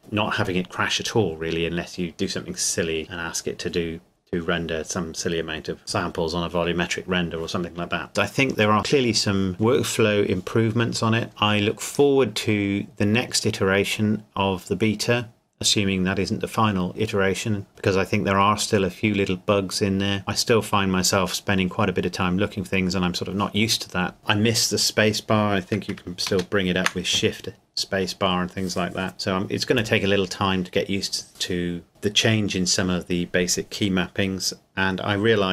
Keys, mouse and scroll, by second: 26.0 ctrl+Num_Lock, 26.3 space.